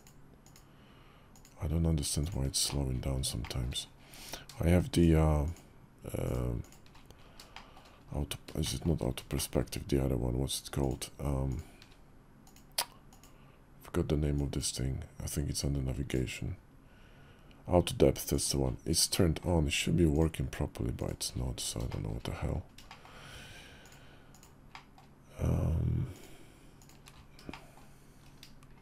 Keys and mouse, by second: 0.2 shift+click, 2.0 shift+click, 3.2 shift+click, 7.3 shift+click, 8.4 shift+click, 9.1 shift+click, 10.6 shift+click, 12.3-13.0 drag, 18.8 shift+click, 21.6 shift+click, 22.6 shift+click, 23.6 shift+click, 24.1 shift+click, 24.4 shift+click, 27.3 shift+click, 28.5 shift+click.